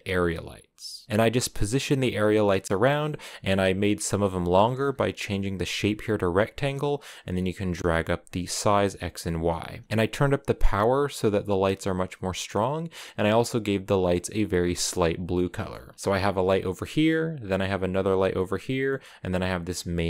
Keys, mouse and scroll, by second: 1.0 middle click, 1.3 right click, 2.2 middle click, 2.7 scroll down 2, 2.8-6.4 middle drag, 6.4-8.2 drag, 8.6 middle click, 9.3 a, 9.8-12.2 right drag, 12.2 click, 12.7-14.8 scroll up 2, 14.3 click, 14.8 middle click, 15.2 scroll up 1, 15.4-15.7 scroll down 4, 15.7 a, 15.9 middle click, 16.8-17.6 scroll up 3, 17.6 right click, 18.2-19.4 middle drag, 19.4 right click.